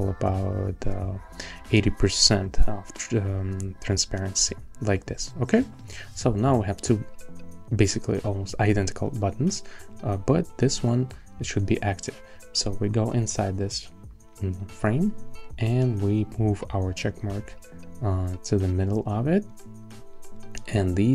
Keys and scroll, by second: 0.2 Down, 1.0 Down, 2.3 Down, 15.5 shift+Down.